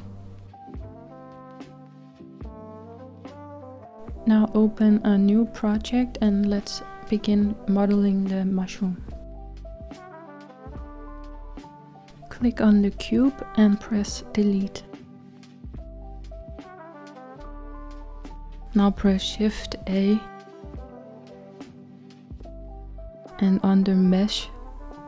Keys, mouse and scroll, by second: 3.9-11.4 middle drag, 11.4 click, 13.8-16.9 shift+middle drag, 16.9 Return, 17.1 typing, 21.7 shift+a.